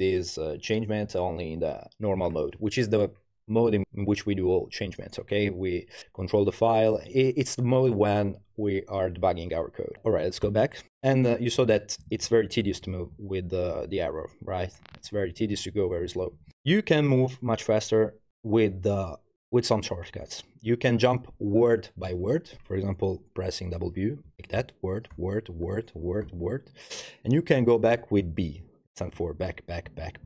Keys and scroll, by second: 10.4 u, 11.6 Left, 11.8 Left, 11.9 Left, 12.3 Left, 12.4 Left, 12.6 Left, 13.1 Left, 14.0 Up, 14.2 Up, 14.5 Up, 14.8 Up, 14.9 Up, 15.4 Up, 15.7-16.5 typing, 16.4 Down, 24.3 w, 28.4-30.2 typing.